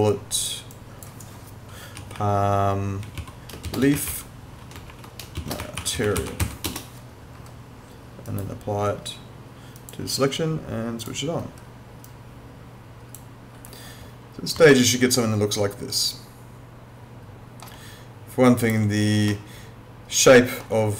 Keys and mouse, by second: 1.7-6.9 typing, 8.3 right click, 9.8 click, 14.7 alt+middle click, 18.6 click, 19.3 alt+middle click.